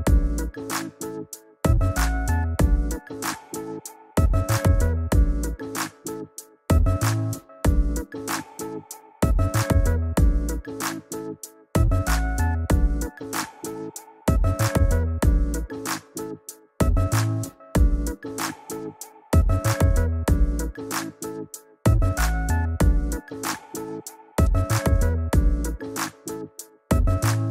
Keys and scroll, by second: 10.3 shift+Right, 11.3 shift+Up, 20.4 shift+Down, 26.1 shift+Down, 26.5 shift+Up.